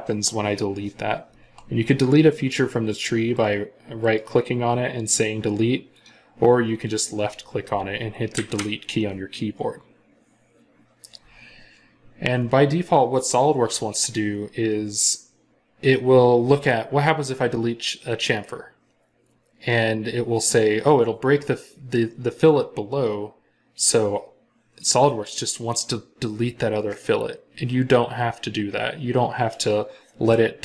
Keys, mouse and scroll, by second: 3.2 right click, 8.2 Delete.